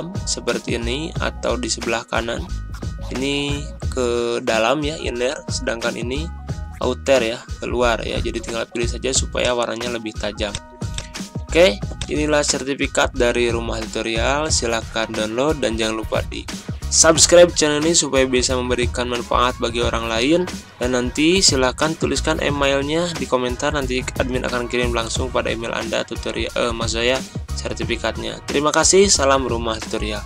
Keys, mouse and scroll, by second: 12.6 ctrl+scroll down 1, 13.4 ctrl+scroll down 1, 14.3 ctrl+scroll down 1.